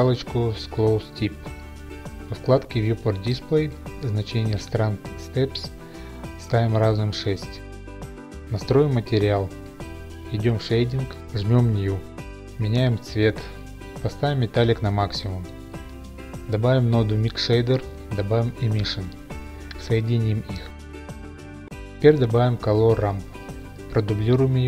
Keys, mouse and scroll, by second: 0.7 click, 3.1 click, 3.9 click, 7.0 Return, 7.0 6, 10.4 click, 12.2 click, 12.7 click, 16.2 click, 16.3-16.8 typing, 16.5 click, 17.2 click, 17.6 click, 19.3-19.9 typing, 19.6 click, 20.3 click, 20.5 click, 21.6 click, 22.5 click, 22.6-23.7 typing, 22.8 click, 23.7 click, 24.0 click, 24.1-24.6 scroll.